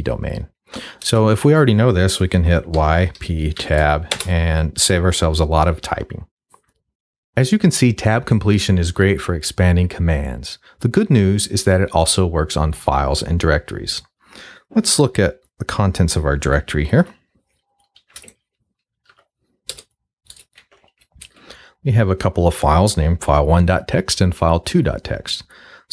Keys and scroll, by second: 1.0 BackSpace, 2.8 y, 3.2 p, 3.6 Tab, 4.1 Return, 16.6-17.5 typing, 18.0 ctrl+z, 18.7-19.6 typing, 20.3 Return.